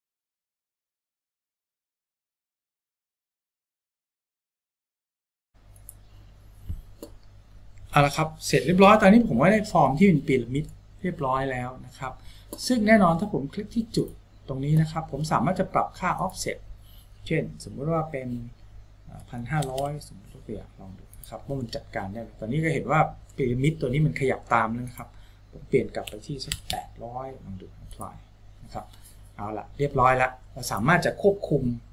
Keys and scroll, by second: 1.7 Tab, 3.0 ctrl+z, 3.8 Escape, 4.7 Tab, 19.5 KP_5, 19.7 KP_0, 26.4 KP_8, 26.6 KP_0.